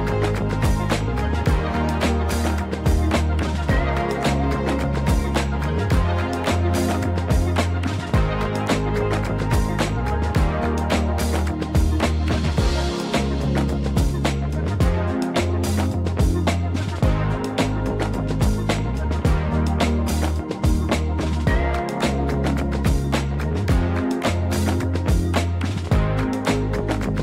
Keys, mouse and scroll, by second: 0.4 s, 1.5 click, 2.6 KP_1, 3.7 g, 4.0 z, 5.6 click, 6.4 KP_0, 7.7-8.1 scroll down 2, 8.7 click, 12.3 click, 13.2 click, 27.0 click.